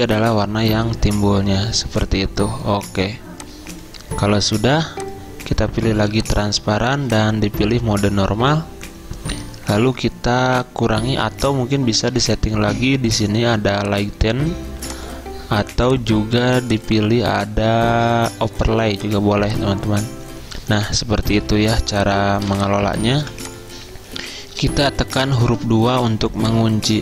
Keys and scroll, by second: 21.9 z, 23.3 v, 25.6 ctrl+2, 26.2 z.